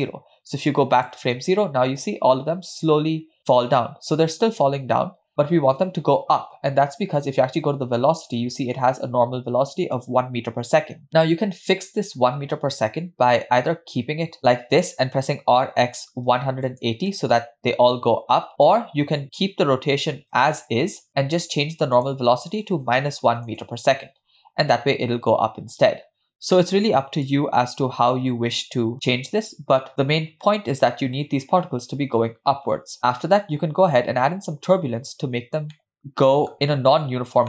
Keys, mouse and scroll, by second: 0.8 click, 1.4 space, 5.1 space, 7.2 scroll up 1, 8.2 click, 15.3 r, 17.1 space, 18.5 space, 19.2 ctrl+z, 20.4 space, 21.0 space, 22.0-23.6 drag, 24.3 space, 26.7 space, 27.3 click, 28.2 space, 35.8-36.5 middle drag.